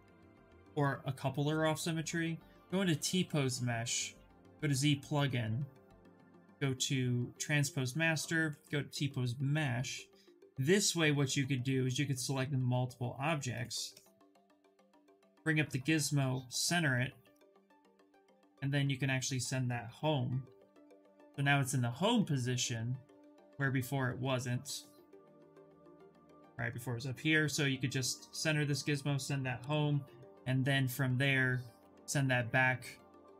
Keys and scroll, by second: 14.0 w, 19.6 f, 25.8 f, 29.2 f, 31.4 q.